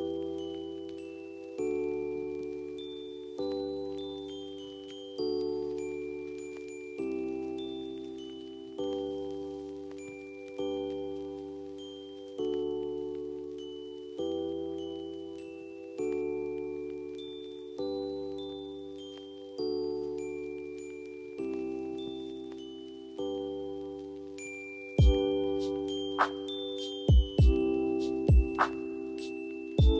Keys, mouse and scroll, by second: 2.6 space, 4.0 right click, 4.8 F12, 7.0-8.3 scroll up 2, 8.3 scroll up 1, 9.4-10.4 shift+drag, 10.4 shift+click, 12.1 e, 12.6 scroll down 1, 13.2-17.2 drag, 16.9 ctrl+right click, 17.5 click, 18.6 F4, 19.9-20.5 drag, 23.2 F4, 26.1 click.